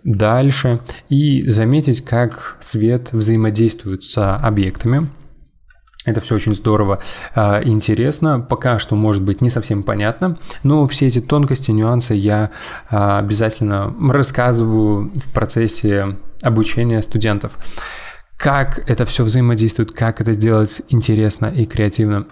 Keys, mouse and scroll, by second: 0.1 g, 1.1 middle click, 1.4 g, 4.7-7.9 middle drag, 20.4-22.3 middle drag.